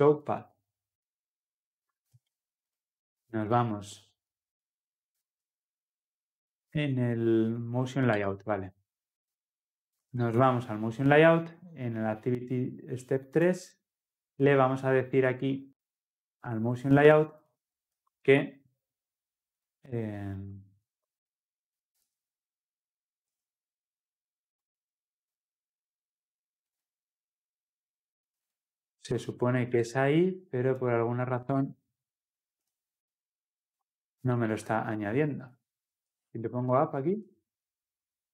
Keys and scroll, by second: 18.5 ctrl+v, 31.6 alt+Return, 34.5 ctrl+z, 37.1 Escape.